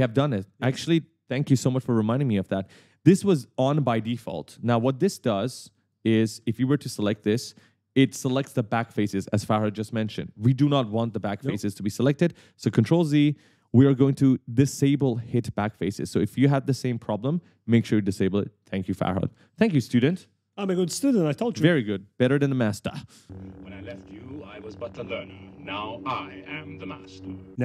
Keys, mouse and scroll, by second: 3.6 click, 4.9 right click, 5.3 s, 6.4 right click, 6.5 w, 11.3 right click, 11.4 w, 12.5 s, 15.4 click, 15.8-16.6 typing, 16.0 right click, 19.0 s, 19.4 w.